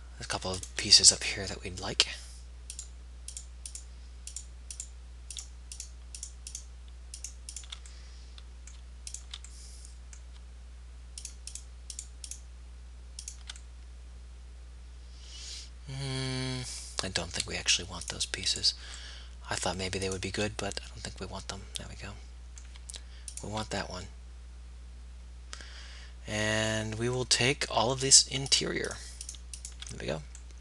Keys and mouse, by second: 1.6-2.6 right drag, 2.6 middle click, 3.0-11.2 right drag, 11.4-14.7 right drag, 14.7-16.2 middle drag, 18.1-22.0 right drag, 23.4 right click, 23.9-26.1 middle drag, 27.7 middle click.